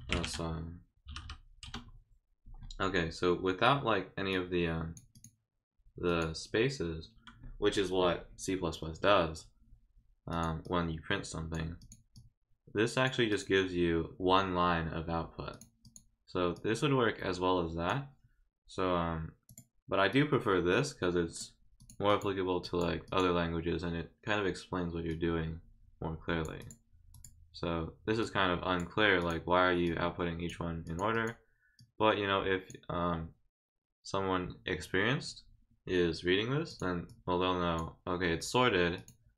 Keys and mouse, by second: 4.3 click, 5.1 click, 6.1 click, 10.3 click, 10.6 click, 11.8 click, 12.1 click, 13.3 click, 15.5 click, 15.8 click, 16.5-17.9 drag, 19.5 click, 20.1-21.4 drag, 21.8 click, 22.1 click, 22.6 click, 23.0 click, 25.1-26.4 drag, 26.6 click, 27.1 click, 28.2 click, 29.2 click, 29.8 click, 30.8 click, 31.1 click, 31.8 click, 36.7 click, 37.1 click, 38.9 click.